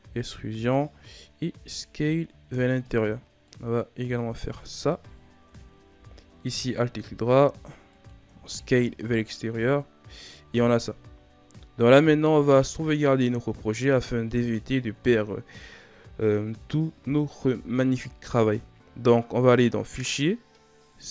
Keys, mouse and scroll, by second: 1.5 s, 3.4 click, 4.1 Tab, 4.4 scroll down 5, 5.0-5.4 scroll up 4, 5.4 Tab, 6.4 alt+right click, 7.1 s, 8.2 Tab, 8.6 scroll down 4, 9.3-10.3 scroll down 6, 10.3-10.8 scroll up 5, 11.2-14.4 shift+scroll down 5, 16.7-19.7 scroll down 1, 19.7-21.1 drag.